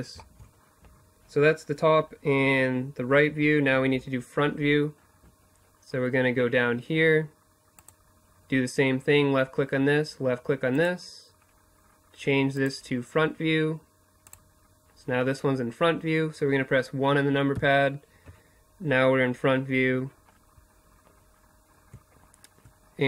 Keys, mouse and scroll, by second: 6.2-7.7 drag, 11.0-12.7 drag, 12.7-16.0 middle drag, 16.0 KP_1, 18.7 click, 22.2-23.0 drag.